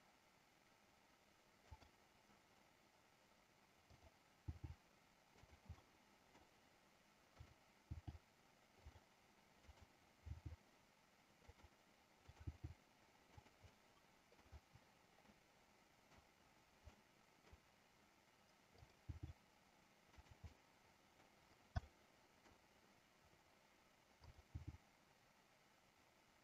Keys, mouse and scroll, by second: 1.9 click, 5.8 middle click, 5.8-6.2 scroll up 1, 7.6 click, 7.9 g, 8.9 click, 9.8 click, 11.6 click, 12.3 click, 13.5 click, 13.5 g, 13.9 scroll up 1, 14.2 middle click, 15.4 scroll up 1, 15.6 middle click, 17.1 scroll up 1, 17.3 middle click, 18.9 click, 19.0 g, 20.2 click, 20.7 scroll up 1, 20.8 middle click, 22.0 middle click, 24.6 g.